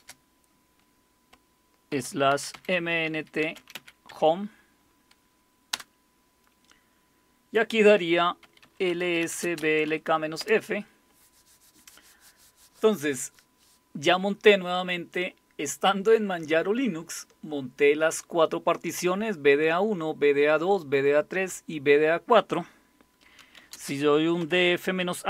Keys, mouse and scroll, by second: 1.9-4.2 typing, 5.7 Return, 8.2-10.4 typing, 10.4 Return, 23.2-25.2 typing.